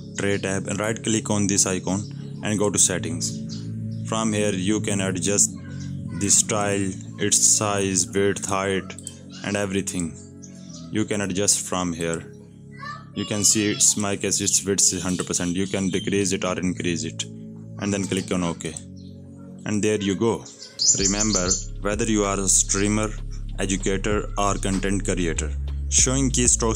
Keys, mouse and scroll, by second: 20.5 click, 21.4-22.8 typing, 22.7 right click, 23.5 click, 25.9 click.